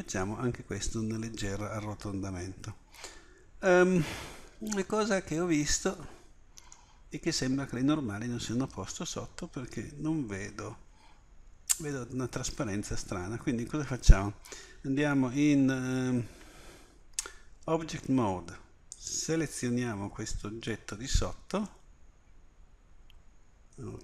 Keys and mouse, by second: 0.0 middle click, 0.3 middle click, 17.2 Tab.